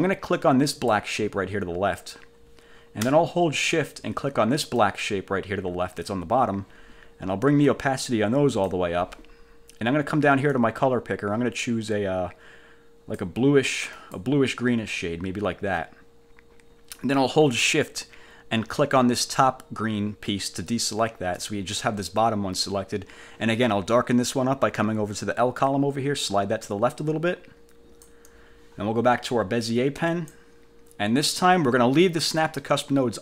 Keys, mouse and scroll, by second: 0.9 click, 4.9 shift+click, 7.8 click, 10.6-13.5 drag, 14.1 click, 20.8 shift+click, 25.8-28.4 drag, 30.2 click.